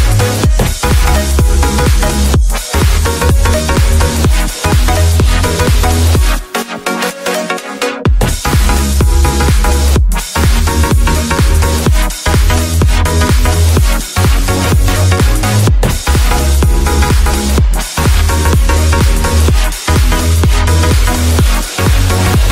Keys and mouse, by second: 0.9 Tab, 2.2-8.9 shift+drag, 12.2-13.9 shift+drag, 14.6-15.9 drag, 16.8-18.7 shift+drag, 19.6-19.9 drag, 20.4-21.3 drag, 22.1 middle click.